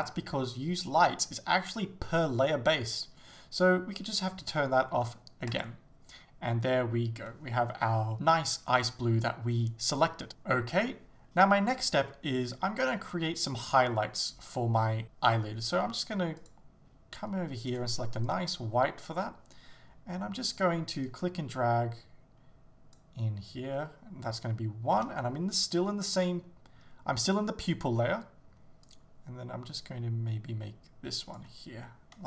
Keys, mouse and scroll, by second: 21.2 click, 25.0 Return, 28.9 click.